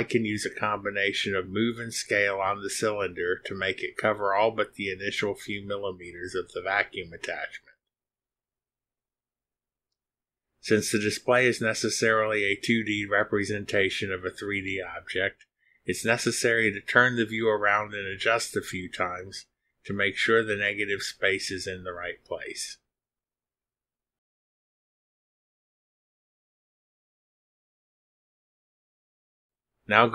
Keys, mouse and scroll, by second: 1.2 click, 2.0 click, 3.7-5.0 drag, 6.4 click, 7.6 click, 8.4-10.0 drag, 10.3 click, 11.1 click, 12.4 click, 13.2 click, 14.7 click, 15.8 click, 17.4 middle click, 19.0 click, 19.6-21.3 drag, 22.2 click, 22.5 click, 24.2 middle click, 25.3-27.6 drag, 27.9-29.3 drag, 29.9 click.